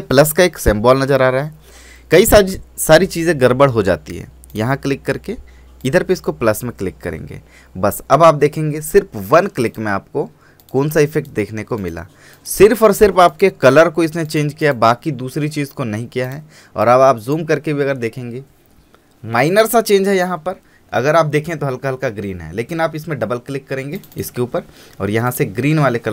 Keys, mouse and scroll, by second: 8.1 click, 9.8 click, 18.2 scroll down 1, 24.1-26.1 drag.